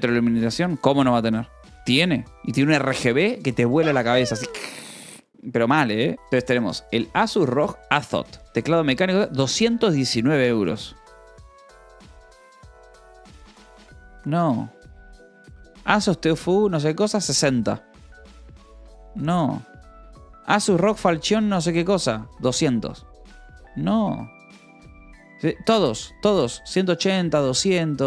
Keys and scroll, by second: 6.1 alt+Delete.